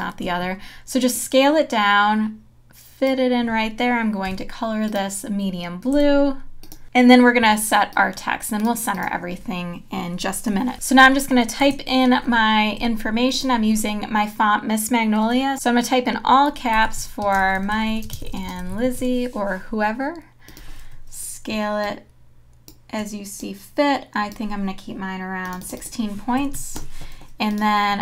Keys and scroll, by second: 4.2 i, 5.9 v, 10.7 BackSpace, 12.8 t, 16.5-19.5 typing, 26.4 KP_1, 26.6 KP_6, 26.7 KP_Enter.